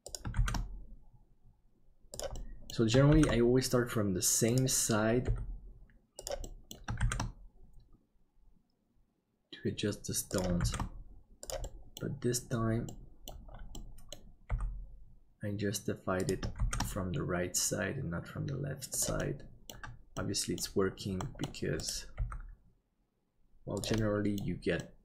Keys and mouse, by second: 2.5 middle click, 5.2 g, 6.6 middle click, 7.0 shift+d, 10.6 shift+d, 11.6 middle click, 13.0 middle click, 13.9 middle click, 14.5 g, 16.6 shift+d, 19.3 middle click, 20.3 middle click, 21.2 middle click, 22.2 g, 24.2 middle click, 24.9 middle click.